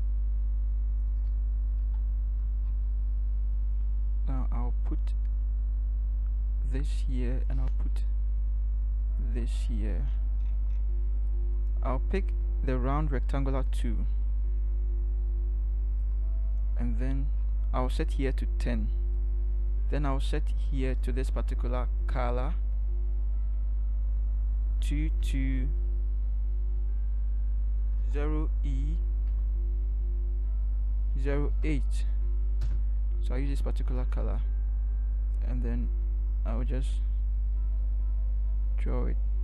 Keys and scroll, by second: 1.2 ctrl+=, 1.9 ctrl+=, 24.8 2, 25.2 2, 28.0 0, 29.3 e, 30.9-32.0 typing, 32.7 Return.